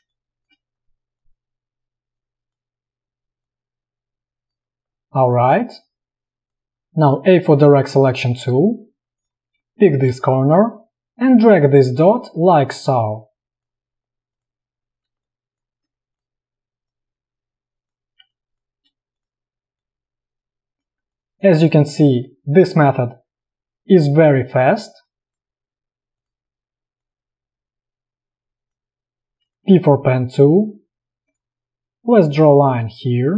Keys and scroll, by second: 0.1 space, 5.7 space, 7.3 a, 15.3 space, 18.3 space, 21.1 space, 25.0 space, 29.7 p.